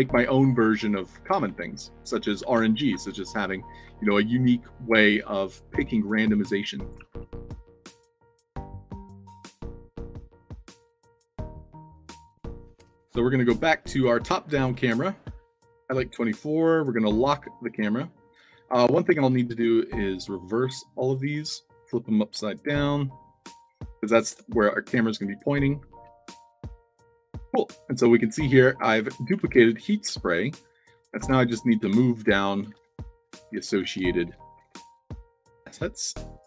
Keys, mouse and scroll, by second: 0.0 d, 1.1 d, 1.5-2.0 alt+drag, 2.0 w, 2.2 space, 2.3 a, 3.3 space, 3.4 d, 3.8 c, 6.2-6.8 alt+drag, 6.8 a, 7.1 space, 7.3 w, 9.1 click, 11.3 click, 12.3 click, 12.8 click, 14.0 click, 14.5 click, 14.9 click, 15.2-16.0 typing, 16.7 click, 17.6 click, 18.3 alt+click, 20.6-21.3 drag, 22.3 o, 23.1 shift+click, 25.5-28.9 typing, 31.2 Tab, 32.7-35.2 typing, 35.3 click, 35.8 alt+click.